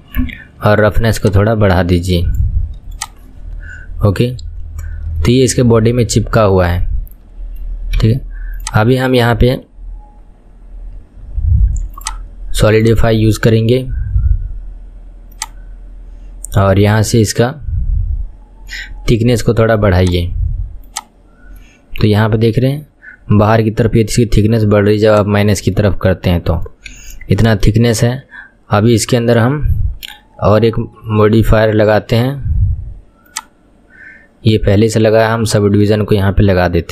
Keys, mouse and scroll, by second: 1.2-3.1 shift+drag, 3.8-4.6 scroll up 6, 4.6-5.2 scroll down 6, 5.2-8.0 shift+middle drag, 8.0 KP_1, 8.6 click, 12.0 click, 12.8-16.0 drag, 16.5-17.0 scroll down 1, 17.0 scroll down 5, 17.2-17.6 scroll up 1, 17.6-18.4 scroll down 5, 18.4-20.0 scroll down 5, 20.0-21.6 drag, 21.6-22.3 middle drag, 22.3-23.3 scroll up 3, 23.3-25.1 scroll up 1, 25.1 click, 25.8-27.0 middle drag, 27.0 KP_1, 27.3-27.7 scroll down 3, 27.7-30.7 shift+middle drag, 30.8-32.2 scroll up 10, 32.2 scroll up 2, 33.4 click, 35.2-35.5 scroll up 5, 35.7-36.9 shift+middle drag.